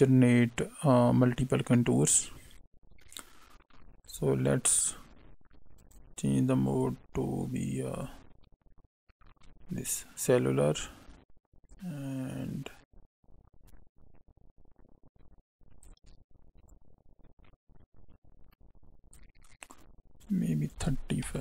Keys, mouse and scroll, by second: 4.0 click, 6.6 click, 11.6 shift+click, 16.6 click, 20.2 click.